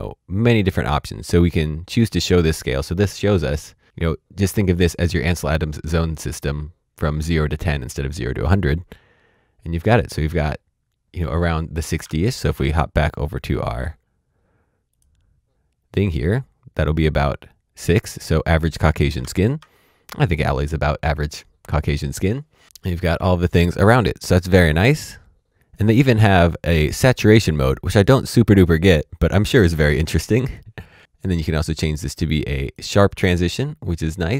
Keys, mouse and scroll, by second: 0.8 click, 12.0 alt+Tab, 13.5 click, 19.2 alt+Tab, 25.5 click, 32.5 click.